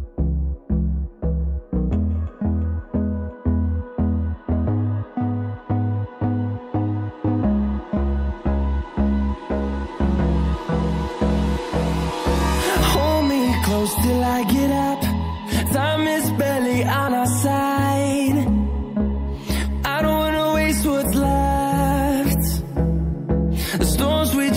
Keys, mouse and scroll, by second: 0.5 click, 2.3 shift+click, 5.3 scroll down 1, 5.8-6.2 scroll up 1, 8.1 scroll down 1, 8.8 scroll up 1, 10.5 click, 10.7 double click, 11.9 click, 14.4 ctrl+z, 14.7 ctrl+z, 15.4 click, 16.2 click, 18.7 scroll down 1, 19.3 scroll up 1, 19.7 click, 20.9 scroll down 1, 22.1 shift+click, 23.0 shift+click, 23.7 shift+click.